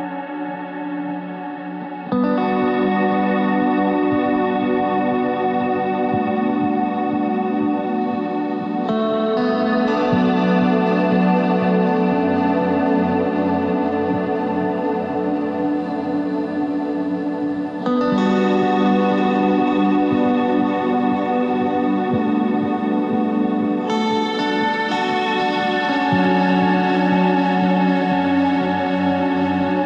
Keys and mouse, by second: 2.2 ctrl+b, 6.4 KP_1, 7.0 Tab, 7.6 Tab, 8.5 z, 9.0 z, 11.0 right click, 11.4 KP_3, 11.8 z, 12.3 c, 18.7 Tab, 19.0 z, 19.8 Tab, 23.6-25.0 middle drag, 25.0 ctrl+r, 26.9 g, 29.0 ctrl+Tab.